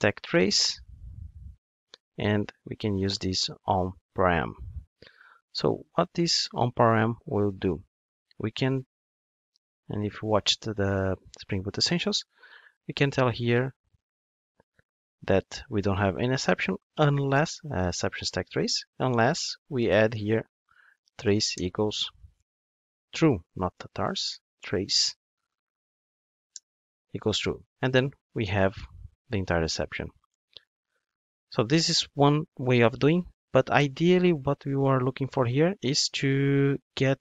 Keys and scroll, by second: 1.3 Return, 4.8 super+F9.